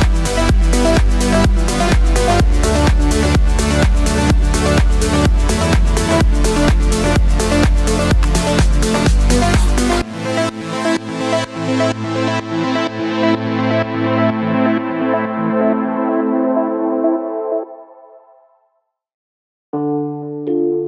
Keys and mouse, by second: 1.4 KP_1, 2.1 KP_3, 2.1 r, 3.1 g, 4.3-7.2 typing, 9.0 click, 9.3-20.8 shift+middle drag, 10.5 r, 11.1 g, 12.1 r, 12.6 g, 14.1-17.5 typing, 18.7 g, 19.7 s, 20.7-20.8 drag.